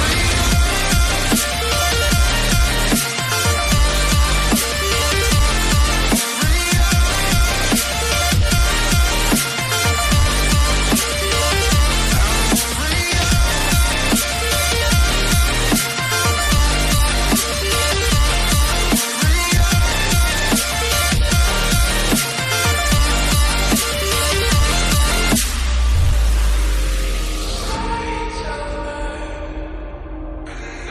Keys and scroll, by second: 12.7 o, 29.0 ctrl+z.